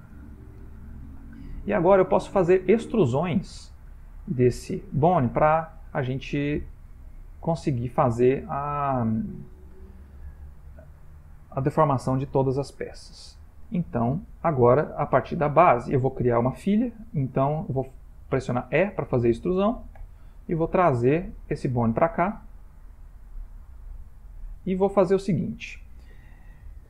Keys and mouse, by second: 2.2 click, 5.6 shift+middle click, 6.6 ctrl+middle click, 12.2 ctrl+middle click, 14.1 shift+middle click, 20.3 e.